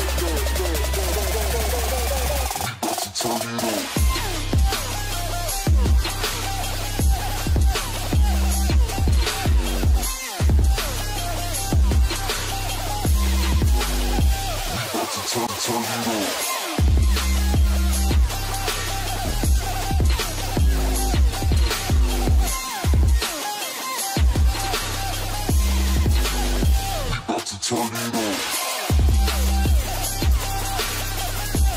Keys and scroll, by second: 1.0 ctrl+space, 20.0 ctrl+space, 23.8 ctrl+space.